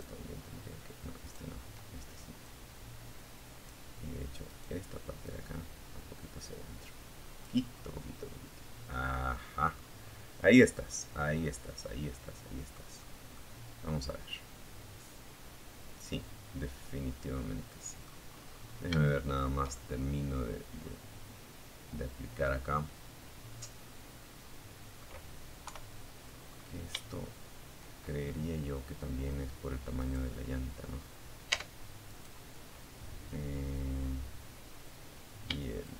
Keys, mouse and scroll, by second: 0.6 click, 0.7-2.0 right drag, 2.7 right click, 3.4-5.8 right drag, 5.9 scroll down 1, 6.2-7.6 middle drag, 8.3 scroll down 1, 8.9-9.4 scroll down 1, 9.4-11.1 middle drag, 11.2 scroll up 2, 11.2 scroll down 1, 11.6-16.4 middle drag, 16.4-17.0 scroll up 1, 17.3 shift+middle click, 18.1-23.4 shift+middle drag, 23.8 KP_3, 24.4-25.0 scroll down 2, 28.2 right click, 29.7 Tab, 30.3 right click, 34.0 shift+click, 34.8 shift+middle click.